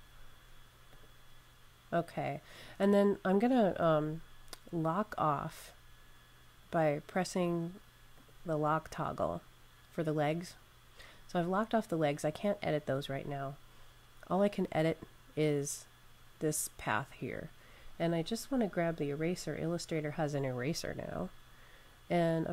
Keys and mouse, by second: 0.8 click, 8.0 click, 10.4 click, 15.3 click, 17.7 click, 17.9 click, 19.8 click.